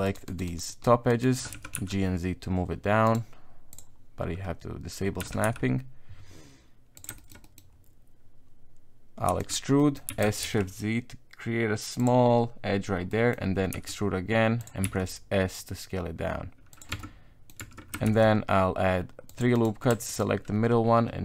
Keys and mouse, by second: 0.0 shift+right click, 0.3 shift+right click, 0.5 shift+right click, 0.7 shift+right click, 1.1 shift+right click, 1.5 g, 3.7 click, 5.2 g, 7.1 shift+middle click, 7.4 middle click, 9.3 e, 9.8 middle click, 10.1 s, 13.1 middle click, 13.7 e, 14.8 s, 16.9 Tab, 17.0 middle click, 17.6 Tab, 18.0 ctrl+r, 20.1 alt+right click.